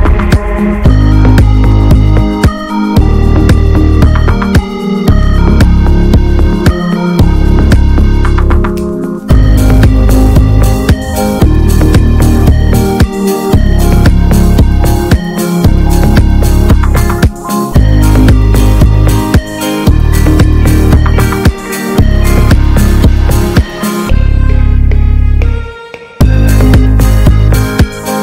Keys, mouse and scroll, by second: 0.9-1.4 scroll down 4, 1.2 Tab, 1.5-2.0 shift+middle drag, 2.0-3.0 scroll up 3, 2.1 click, 2.4 middle click, 3.0 shift+middle click, 3.7 ctrl+r, 4.6 ctrl+b, 6.3 shift+middle click, 7.2 ctrl+r, 8.0 ctrl+b, 11.0 Tab, 11.1 drag, 11.3 scroll down 3, 11.5-11.8 middle drag, 11.8 scroll up 1, 11.9 click, 12.3 ctrl+1, 12.7 ctrl+2, 13.0 click, 13.2-13.6 right drag, 13.6-14.0 scroll down 2, 14.0-14.4 middle drag, 14.4 drag, 14.6-15.1 middle drag, 15.1 click, 15.2 ctrl+a, 15.7-16.9 shift+middle drag, 16.9 click, 17.2 ctrl+a, 17.6-19.4 middle drag, 19.4-19.8 drag, 19.8 ctrl+a, 20.4 shift+middle click, 20.5 ctrl+s, 21.8-28.2 drag.